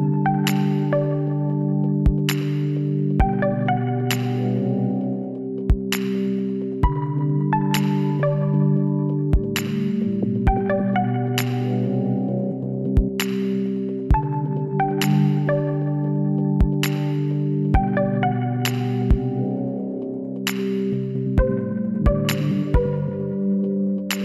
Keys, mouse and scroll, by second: 1.1-2.9 drag, 3.5-5.1 drag, 4.4 b, 5.9-7.6 drag, 7.6 click, 10.0 b, 11.1 b, 13.6 s, 17.2-19.0 drag, 19.8-21.4 middle drag, 20.8 b, 23.0-24.2 drag.